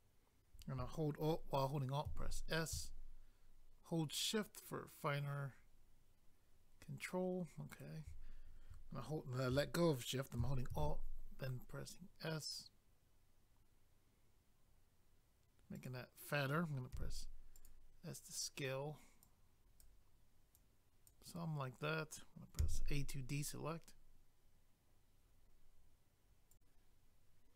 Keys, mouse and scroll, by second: 2.0 alt+s, 7.7 shift+right click, 10.7 alt+s, 15.8 click, 16.9 s, 17.6 click, 19.2 click, 20.5 click, 22.6 a, 26.5 click.